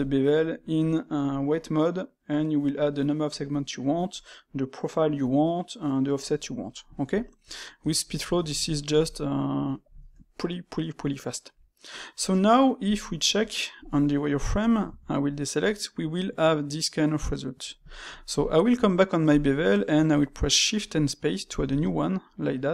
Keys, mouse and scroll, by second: 6.6-7.7 middle drag, 7.7 Tab, 8.1-12.8 ctrl+middle drag, 12.8-14.2 drag, 14.2-14.8 middle drag, 14.8 a, 15.2-18.3 middle drag, 18.3 click, 18.6 space.